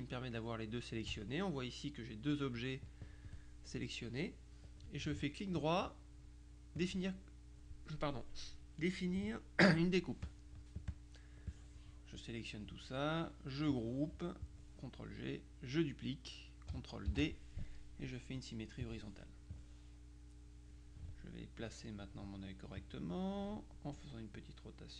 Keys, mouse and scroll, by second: 0.0 shift+click, 5.5 right click, 6.9 click, 8.9 right click, 10.3 click, 11.0 click, 14.6 click, 17.2 ctrl+d, 18.9 click, 19.6-21.2 drag, 22.1 click, 22.9-23.9 drag, 24.4-24.9 drag.